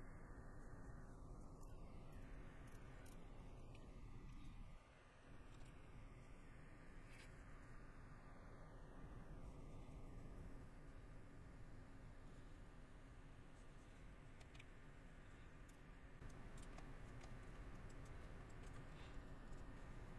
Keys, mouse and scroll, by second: 0.6 middle click, 1.6-2.3 scroll, 1.7 middle click, 2.3 middle click, 2.6 scroll, 2.8 middle click, 4.6 middle click, 6.2 middle click, 9.5 middle click, 12.3 middle click, 13.6 middle click, 14.8 middle click, 15.6 scroll, 15.8 middle click, 18.2 shift+middle click.